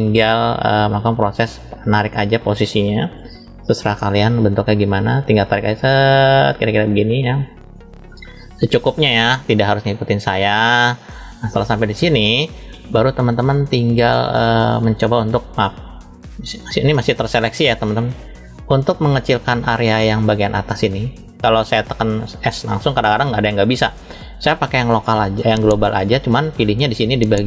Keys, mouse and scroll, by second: 0.1-1.8 middle drag, 3.0 KP_3, 3.7 scroll down 1, 4.5 shift+middle click, 5.4 click, 11.0-12.5 middle drag, 13.3 click, 17.4-18.0 drag, 18.7 middle click, 19.9 middle click, 23.7-26.4 drag, 26.9-27.4 drag.